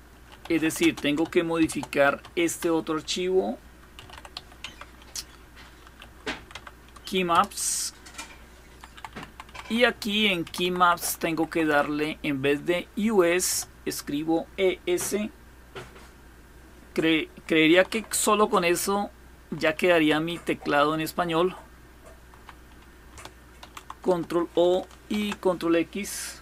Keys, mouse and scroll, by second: 0.0-6.5 typing, 6.9 Return, 8.3 Down, 8.6 Down, 8.8 Down, 8.9 Down, 9.1 Down, 9.4 Up, 9.5 Up, 9.5-11.1 typing, 9.7 Up, 11.3 Right, 12.8 Delete, 12.8 typing, 17.3 Down, 17.5 Down, 17.7-19.2 Down, 19.4 Down, 19.6 Down, 19.9-22.1 Up, 23.2 ctrl+o, 23.7 Return, 24.8 ctrl+x.